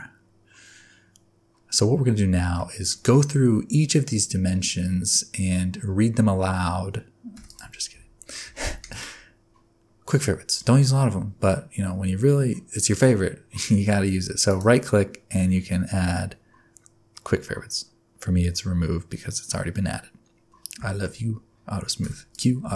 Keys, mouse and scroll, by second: 2.5 shift+middle click, 7.3 q, 7.9 Tab, 8.1 scroll down 3, 8.8 click, 14.4 right click, 20.8 shift+middle click, 22.0 q.